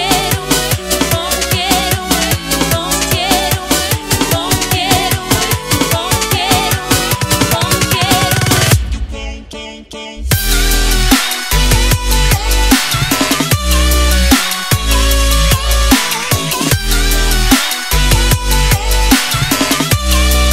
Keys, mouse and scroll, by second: 5.0 Delete, 5.7 click, 6.5 ctrl+c, 6.9 click, 8.8 v, 9.8 ctrl+0, 10.5 click, 11.7 0, 12.3 click, 15.7 Return.